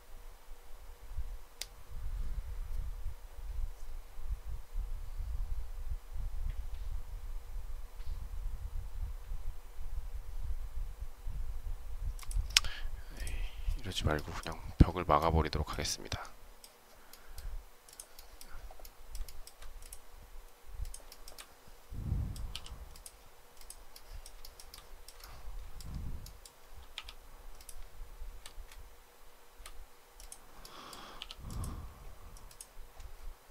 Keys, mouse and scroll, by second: 19.1 shift+middle click, 21.0 shift+middle click, 21.1 shift+double middle click, 22.4 p, 24.3 shift+middle click, 25.1 shift+middle click.